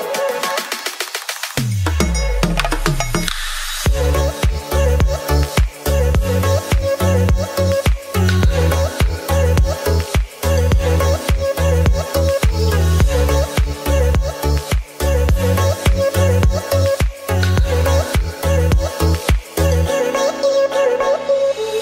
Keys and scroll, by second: 2.0 ctrl+z, 8.2 space, 9.8 space, 17.5 ], 18.6 space, 19.5 ].